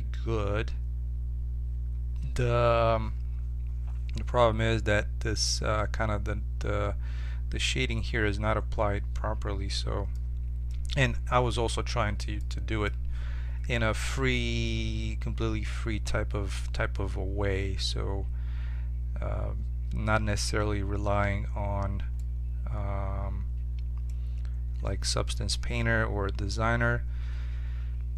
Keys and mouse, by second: 12.6-16.9 middle drag, 20.8-23.5 middle drag.